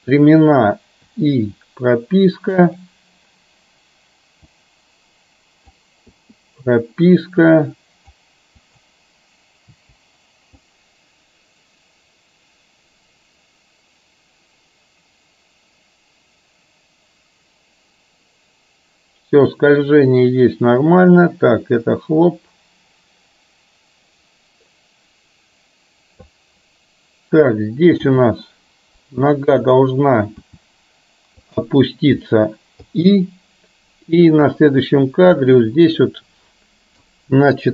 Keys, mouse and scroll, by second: 2.8 click, 4.4-5.9 drag, 7.6 click, 8.7 click, 9.8 Delete, 10.8-26.3 drag, 28.2 g, 30.6 r, 32.9 i, 34.6-35.6 drag, 36.1-37.1 middle drag, 37.1 click.